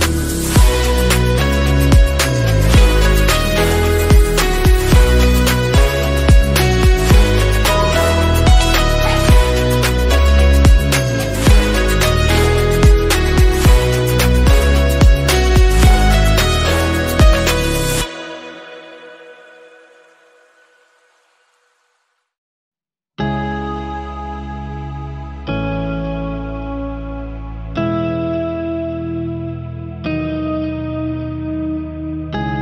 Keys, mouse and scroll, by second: 0.1 alt+click, 0.7 q, 2.3 click, 3.3-4.6 right drag, 4.6-5.7 drag, 5.7 middle click, 5.9-6.4 scroll up 2, 7.1 click, 7.8 scroll down 2, 8.0-9.4 middle drag, 9.9 Tab, 10.3 Tab, 11.1-12.2 drag, 13.1-16.2 drag, 16.2 Tab, 18.7-25.6 drag, 25.6 middle click, 25.9-26.8 scroll up 1, 26.8-28.9 drag, 28.9 scroll down 1, 29.1 middle click, 29.3 scroll up 1, 29.5-30.7 middle drag, 30.7-32.6 drag.